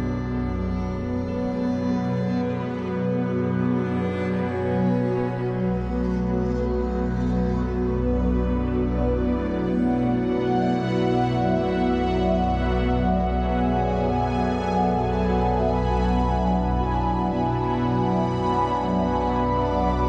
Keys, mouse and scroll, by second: 1.4-6.8 shift+drag, 6.4-6.8 scroll down 2, 6.8-10.5 middle drag, 7.0-7.4 scroll down 2, 7.6-8.7 scroll up 3, 10.5-15.6 drag, 15.6-16.8 middle drag, 16.8-20.0 drag.